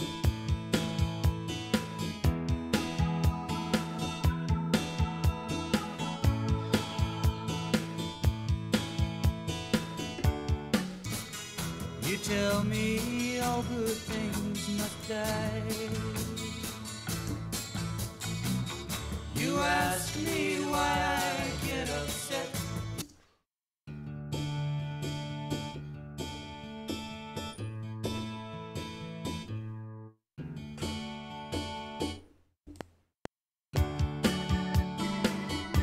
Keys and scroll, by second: 10.7 space, 15.3 q, 17.2 Return, 18.9 ctrl+Right, 23.0 space, 32.6 F7.